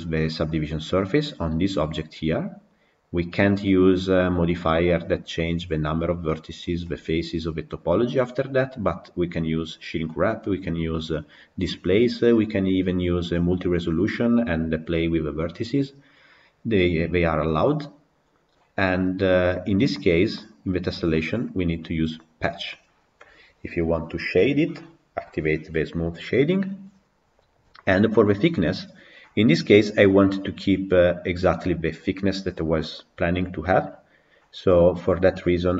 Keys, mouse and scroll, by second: 0.5 click, 19.1 click.